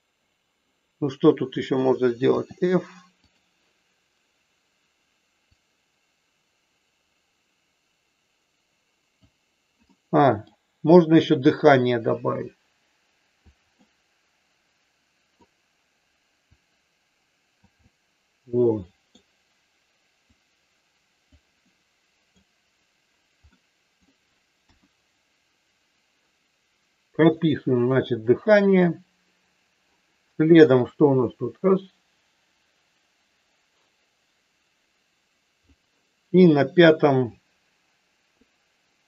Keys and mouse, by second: 5.6-9.1 drag, 9.8 middle click, 11.5-13.5 drag, 13.7-15.3 middle drag, 16.6-17.6 drag, 17.8-19.1 middle drag, 20.3-21.3 drag, 21.6 middle click, 23.5 middle click, 24.6 KP_1, 31.0-35.8 drag, 37.5 click.